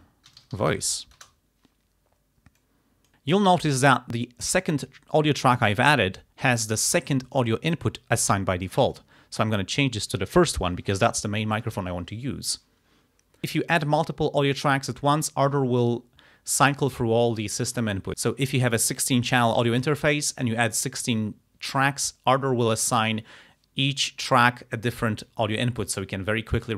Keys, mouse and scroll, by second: 0.1-1.3 typing, 2.6 click, 3.4 click, 9.0 click, 10.2 click.